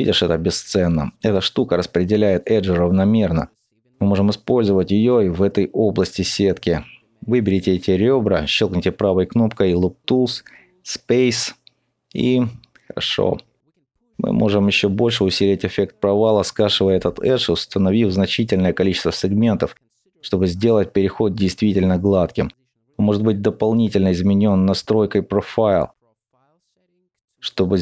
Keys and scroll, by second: 6.3 ctrl+z, 12.7 alt+2, 14.5 ctrl+alt+b.